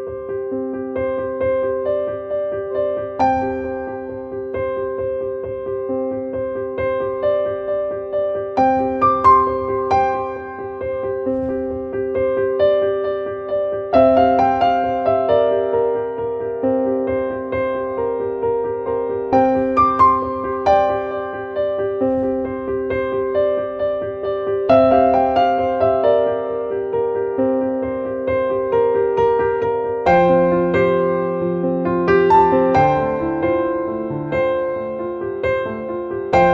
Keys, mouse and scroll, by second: 2.0 click, 4.2 click, 5.4 click, 8.6 click, 9.1 click, 10.2 click, 13.5 click, 17.8 right click, 18.6 click, 21.0-23.5 drag, 25.8 click, 27.6 click, 29.4 click, 30.3 click, 31.7 click, 34.8-36.5 drag.